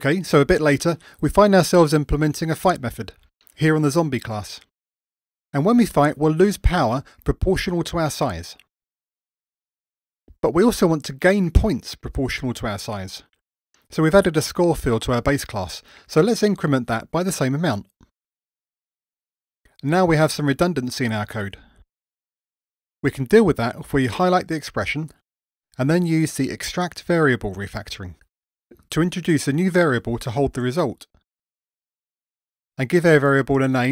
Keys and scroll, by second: 23.9 alt+Up, 31.7 alt+super+v.